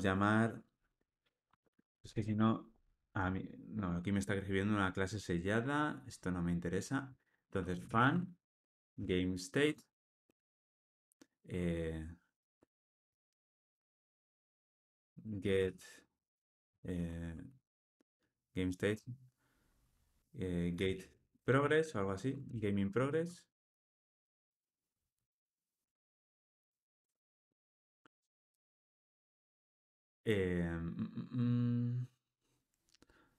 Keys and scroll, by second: 9.9 Return, 25.8 Tab.